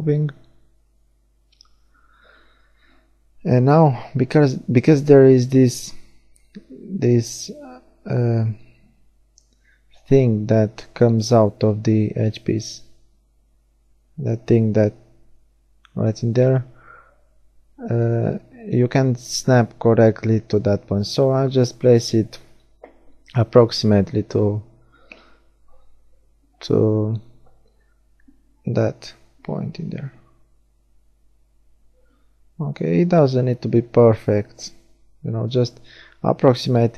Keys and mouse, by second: 1.5-3.3 drag, 3.3-9.7 middle drag, 6.5 g, 13.7 KP_1, 16.9 middle click, 21.1-31.9 middle drag, 31.9-33.7 right drag, 34.8 shift+d, 35.3 right click, 35.7-36.9 drag.